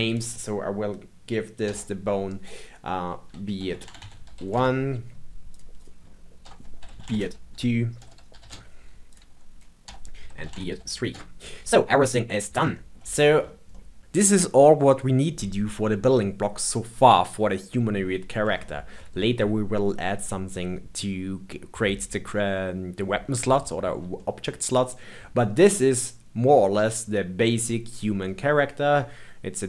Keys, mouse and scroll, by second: 1.6 F2, 5.4 click, 5.7 click, 6.4 F2, 9.0 click, 9.8 F2, 11.9-13.3 middle drag, 13.3 scroll down 1, 13.7-15.1 shift+middle drag, 18.5-21.6 shift+middle drag, 23.6-27.2 shift+middle drag.